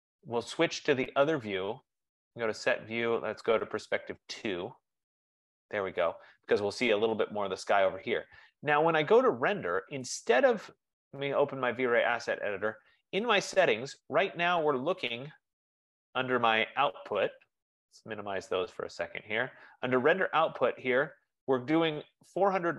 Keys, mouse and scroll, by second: 0.3 click, 1.8 click, 4.7 click, 11.4 click, 13.4 click, 16.8 click, 18.0 click, 18.5 F15.